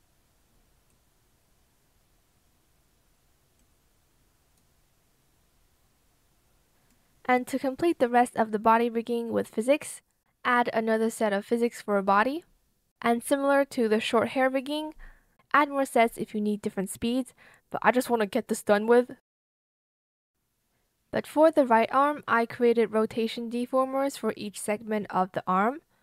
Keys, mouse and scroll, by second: 12.6 ctrl+c, 12.6 ctrl+v, 13.5 BackSpace, 13.6 space, 13.7 Return, 13.7 p, 14.6 b, 16.3 shift+click, 16.4 shift+click, 16.5 shift+click, 17.9 ctrl+shift+z, 19.6 ctrl+shift+z, 20.6 ctrl+z, 20.8 ctrl+z.